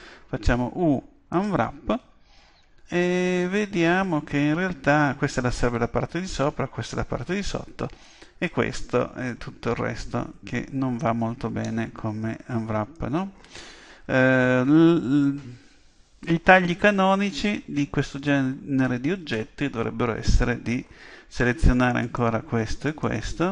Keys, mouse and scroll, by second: 0.0 u, 11.6-14.8 middle drag, 17.2-19.2 middle drag, 20.7 a, 22.0-23.5 right drag.